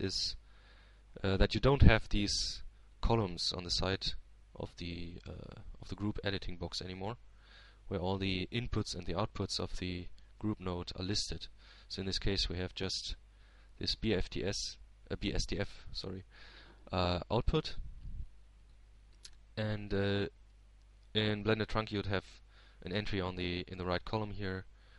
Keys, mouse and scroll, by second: 0.3 Tab, 2.1-3.3 drag, 3.9-6.1 drag, 14.0 shift+Tab, 15.8-17.1 drag, 21.9 click, 24.2 Tab.